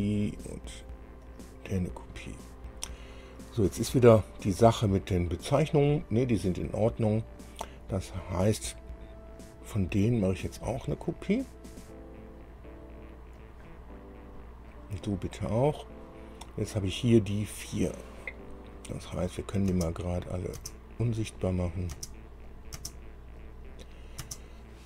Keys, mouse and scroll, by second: 0.4 click, 1.5 click, 2.9 scroll down 2, 10.8 click, 13.6 click, 14.9 click, 16.0 click, 16.7-17.0 scroll down 1, 17.7 click, 19.9 space, 20.5 click, 20.8 space, 21.9 click, 22.1 space, 22.7 click, 23.0 space, 23.6 click, 24.5 space.